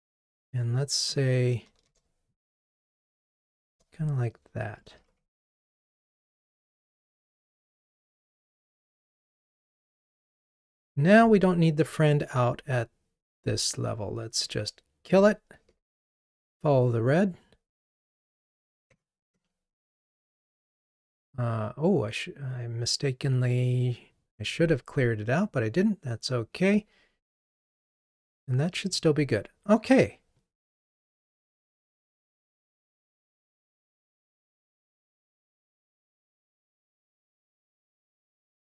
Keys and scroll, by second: 9.4 ctrl+r, 15.9 super+BackSpace, 27.6 ctrl+r.